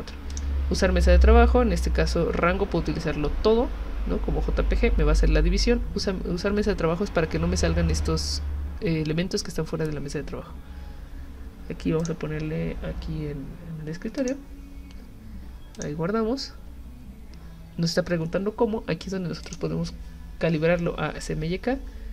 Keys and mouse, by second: 0.3 click, 12.0 click, 14.2 click, 15.8 click, 19.5 click.